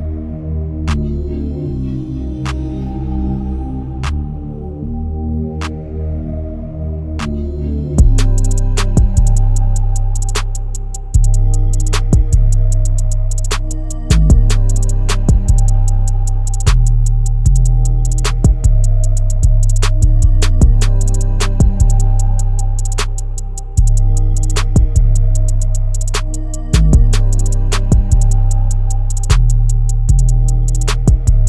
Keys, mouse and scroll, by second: 0.0-1.9 drag, 2.7-4.6 drag, 5.3-13.0 drag, 13.5-15.4 drag, 16.1-17.0 drag, 17.0-17.5 scroll down 6, 17.5 click, 19.3-21.2 drag, 23.4-24.0 scroll down 2, 24.0 Tab, 24.8-25.7 scroll down 3, 25.7-26.8 scroll down 1, 28.7-30.5 drag, 30.8-31.4 drag.